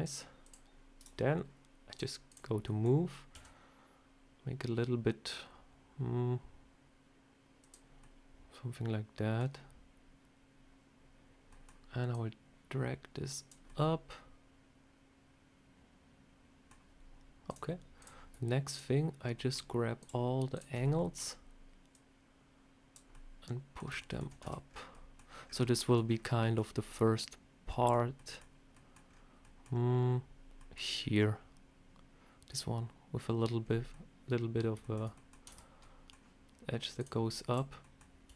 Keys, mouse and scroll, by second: 0.3 click, 1.8 click, 2.2 click, 2.6 middle click, 3.3 s, 7.9 middle click, 11.4 middle click, 12.0 click, 13.6 middle click, 17.4 click, 17.9 click, 18.6 shift+click, 19.3 shift+middle click, 19.9 shift+click, 20.7 middle click, 21.8 click, 23.0 middle click, 23.9 shift+middle click, 24.4 Tab, 24.6 scroll down 4, 24.8 scroll up 1, 24.8 middle click, 25.1 scroll down 1, 33.5 scroll up 3, 33.8 middle click, 34.7 shift+middle click, 35.0 middle click, 35.4 Tab, 35.7 middle click, 36.9 click, 37.4 click, 37.7 middle click, 38.1 s.